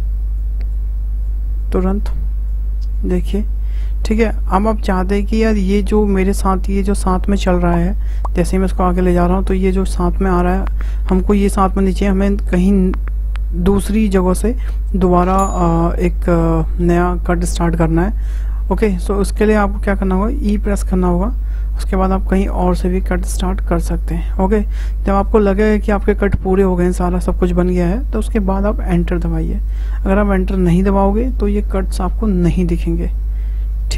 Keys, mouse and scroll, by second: 31.5-33.9 middle drag.